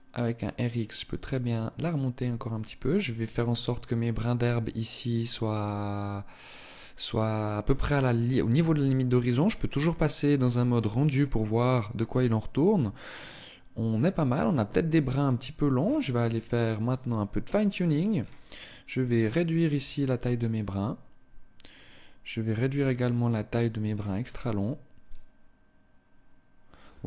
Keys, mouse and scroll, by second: 2.4 click, 8.9 click, 9.3 click, 15.2-15.5 scroll down 1, 16.2 click, 16.2 scroll down 3, 18.2-18.6 scroll down 1, 18.6 click, 19.3 click, 22.1-22.9 scroll up 1, 22.9 click, 22.9-23.3 scroll up 3, 23.3-23.7 scroll down 1, 24.3 scroll down 2, 24.4 click.